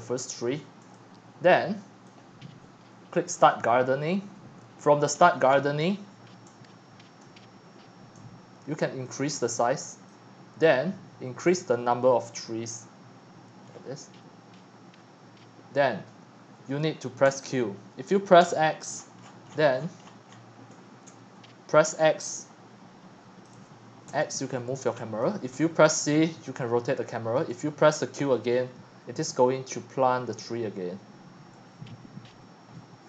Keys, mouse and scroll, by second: 0.5 shift+middle click, 0.9-2.5 typing, 2.2-5.2 drag, 5.2-5.5 scroll down 9, 5.5-7.1 scroll up 30, 7.1 click, 7.4-10.1 shift+middle drag, 10.1-13.7 drag, 13.7 middle click, 13.9-16.6 drag, 16.6-18.4 typing, 18.9-20.1 scroll up 48, 20.3 shift+middle click, 21.1 c, 22.4-22.7 drag, 22.9-23.4 drag, 23.5 click, 23.6 x, 24.1 x, 25.2 click, 25.5 c, 27.4 click, 27.6 q, 31.7 click.